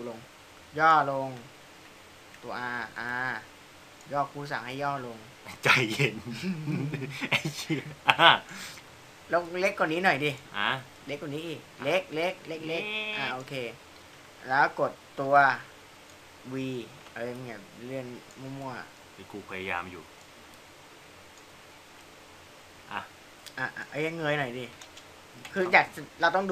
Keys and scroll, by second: 2.2 w, 5.6 r.